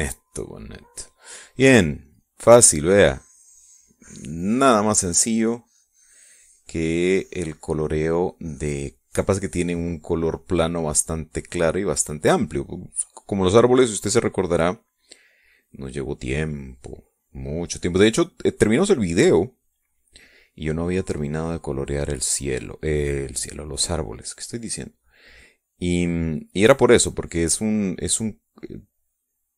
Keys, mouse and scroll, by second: 0.7 middle click, 3.1-12.7 drag, 13.7-20.8 drag, 21.7-28.3 drag, 28.8-29.5 drag.